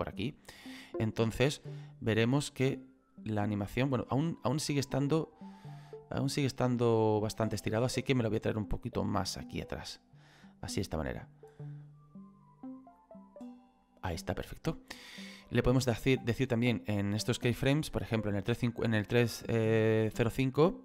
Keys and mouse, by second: 0.7 click, 8.7 click, 10.7 click.